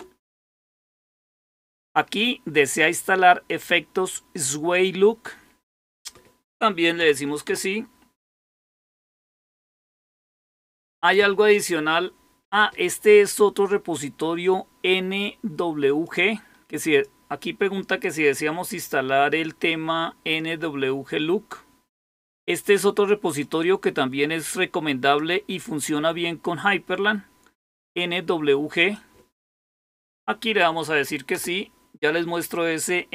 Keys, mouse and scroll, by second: 7.3 Return, 15.9-17.0 drag, 23.3-25.1 drag, 28.7 click, 30.2-31.2 typing.